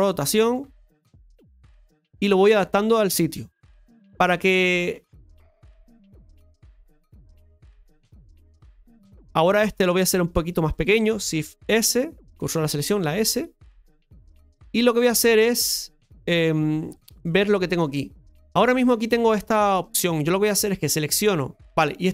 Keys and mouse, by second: 4.4 alt+shift+right click, 5.3-9.1 drag, 10.1 right click, 13.8 s, 14.6 shift+middle click, 17.1-18.5 middle drag, 19.7-21.4 right drag, 21.6 ctrl+z, 21.6 middle click.